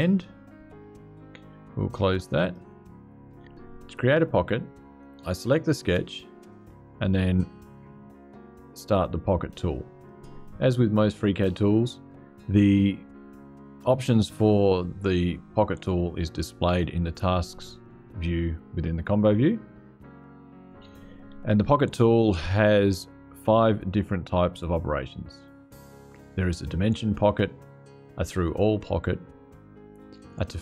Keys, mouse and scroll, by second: 0.4 right click, 2.1 click, 5.5 click, 9.7 click, 22.3 click.